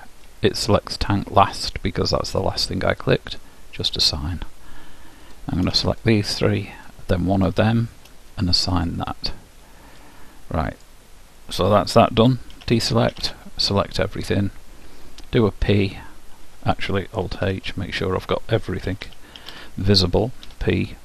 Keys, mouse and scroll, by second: 4.0-10.5 drag, 9.6 middle click, 10.1-11.9 middle drag, 12.7 a, 13.2 a, 15.9 p, 17.7 alt+h, 19.1 a, 19.5 middle click, 19.5 a, 20.6 p.